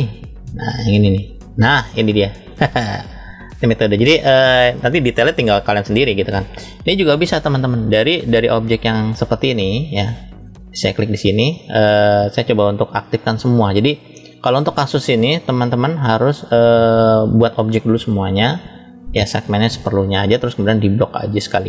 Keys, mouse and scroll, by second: 0.6 click, 1.0 click, 1.8-2.4 middle drag, 2.8-3.5 shift+middle drag, 3.8 scroll up 1, 6.7-7.6 middle drag, 7.8-9.6 drag, 10.6 click, 11.5 click, 15.2-16.2 shift+middle drag, 16.6 click, 18.6 click, 20.8-21.6 drag.